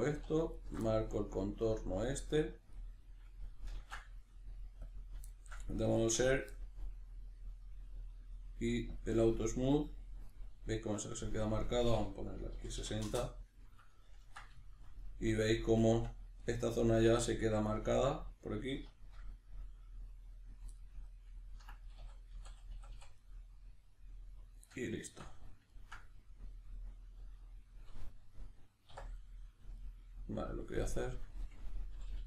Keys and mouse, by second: 0.5 alt+shift+right click, 0.8-8.9 middle drag, 3.7 ctrl+e, 6.0 Tab, 8.9-10.3 drag, 10.3-11.6 middle drag, 11.6-13.9 drag, 13.1 Return, 13.9-25.1 ctrl+middle drag, 22.0 a, 25.1 Tab, 25.7-29.1 ctrl+middle drag, 28.9 1, 29.1 right click, 29.8 shift+right click, 31.0 click, 31.9 g.